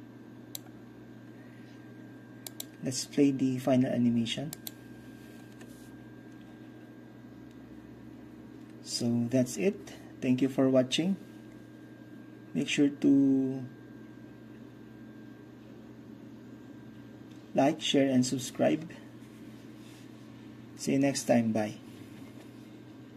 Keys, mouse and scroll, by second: 2.6-4.1 drag, 4.6-6.1 drag.